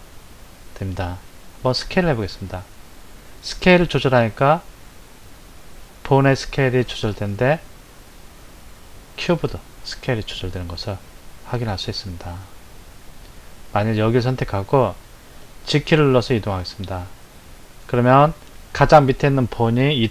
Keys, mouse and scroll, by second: 1.8 s, 14.3 click, 16.1 g.